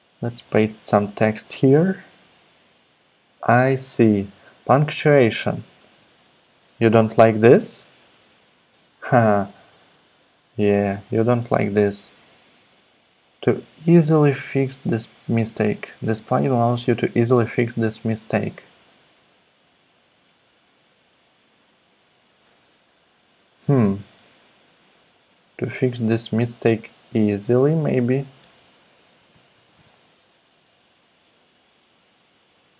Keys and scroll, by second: 0.5 super+v, 6.9 ,, 23.9 BackSpace, 24.6 BackSpace, 25.3 alt+Right, 25.5 alt+Right, 25.6 alt+Right, 26.3-30.3 typing.